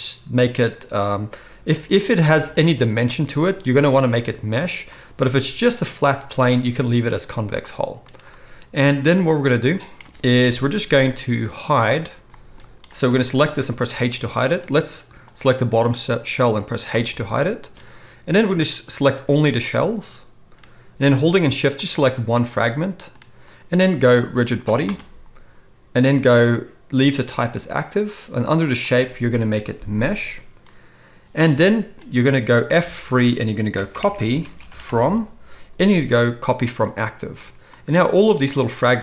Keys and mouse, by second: 10.5 KP_1, 13.0-15.3 middle drag, 13.8 h, 15.3-17.7 drag, 17.7-18.3 middle drag, 18.3-21.8 drag, 21.8-24.4 shift+middle drag, 24.4-38.5 drag, 32.8 F3, 38.5-39.0 middle drag.